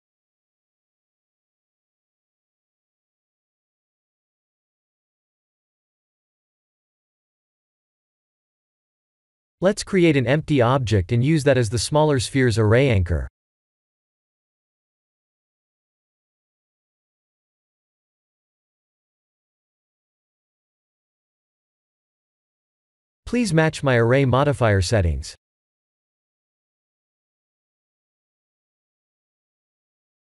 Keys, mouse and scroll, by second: 3.4 click, 4.7 click, 5.6 middle click, 8.0 KP_1, 9.0 click, 10.6 shift+a, 14.6 middle click, 16.6 click, 18.7 click, 19.8 click, 23.6 click, 25.1 click, 25.7 click, 26.6 click.